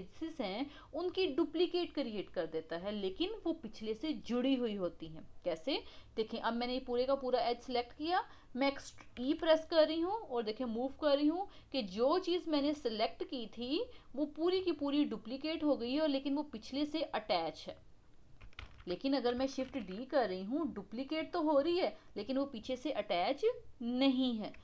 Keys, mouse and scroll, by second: 18.6 ctrl+z, 19.6 shift+d.